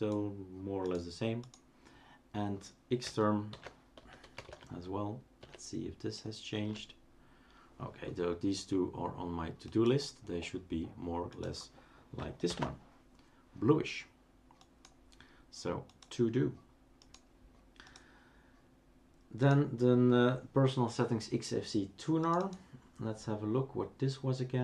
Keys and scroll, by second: 3.5 shift+super+d, 3.7-5.4 typing, 6.7 Return, 12.5 ctrl+alt+t.